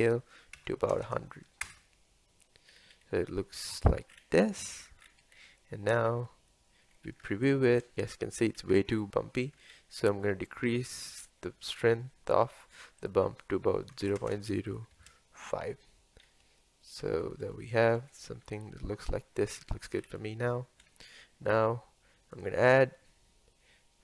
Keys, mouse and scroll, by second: 1.6 KP_0, 2.7-3.6 scroll up 4, 3.6-4.0 scroll down 5, 6.3 scroll down 1, 7.6 ctrl+shift+click, 7.9 scroll up 5, 8.6-9.0 scroll down 3, 15.0 KP_0, 16.2-16.6 scroll up 2, 16.6 shift+middle click, 17.3 scroll up 1, 17.6-18.3 shift+middle drag, 18.3 scroll down 1, 18.5 scroll up 1, 19.5-20.2 scroll down 9, 21.0-22.4 shift+middle drag, 22.4 click.